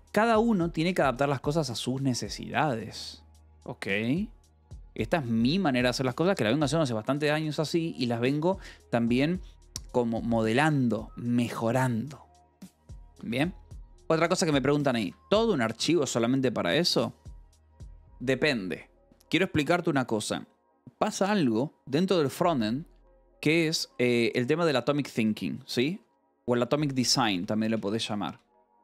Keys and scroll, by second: 1.3 Escape, 7.3 k, 13.8 Escape, 13.9-16.3 typing, 14.9 Escape, 17.1 Escape, 22.3 Escape, 22.6 u, 23.6 Escape, 23.8 k, 25.4-28.8 typing.